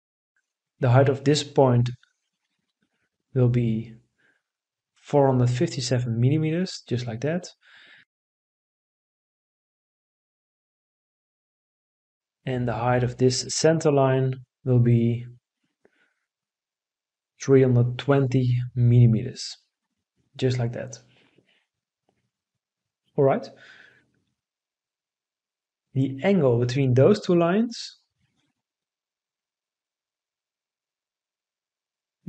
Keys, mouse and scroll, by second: 5.3 4, 5.8 5, 6.4 7, 7.4 Return, 16.6 3, 17.2 2, 17.7 0, 19.2 Return.